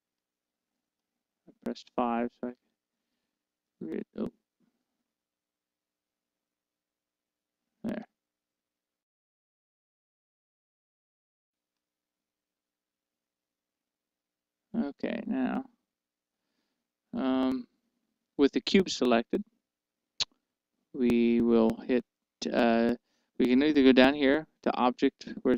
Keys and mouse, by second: 0.6 KP_5, 1.5-8.5 middle drag, 6.9 KP_1, 6.9 KP_2, 8.5 KP_5, 10.4 KP_1, 11.3-14.6 middle drag, 16.4-17.8 right drag.